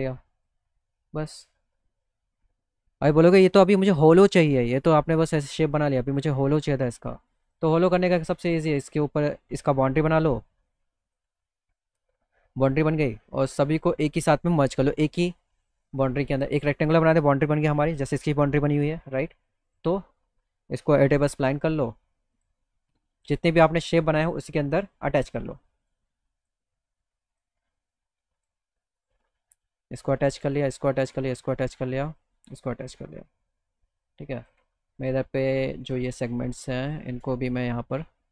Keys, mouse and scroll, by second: 1.3 click, 1.7 click, 2.1 middle click, 2.4 middle click, 2.8 middle click, 6.0 middle click, 7.5 click, 8.3 click, 9.7-11.2 drag, 11.8 middle click, 12.1 middle click, 13.9 click, 19.7 click, 21.0 e, 22.4 click, 26.0 click, 27.4 click, 28.4 click, 29.0 click, 29.6 click, 30.5 click, 31.1 click, 32.0 click, 34.4 click, 35.0 click, 35.9 click, 36.8 click, 37.9-38.3 shift+drag.